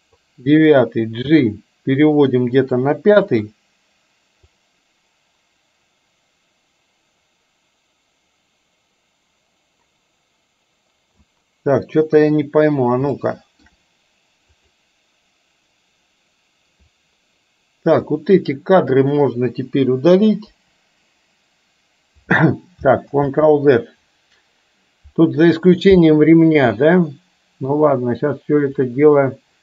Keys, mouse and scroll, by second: 1.4 g, 3.4 click, 4.6-11.4 drag, 12.1 KP_3, 13.3-13.6 shift+middle drag, 14.6 click, 18.0-19.0 drag, 20.5 Delete, 23.1 ctrl+z, 28.9-29.6 drag.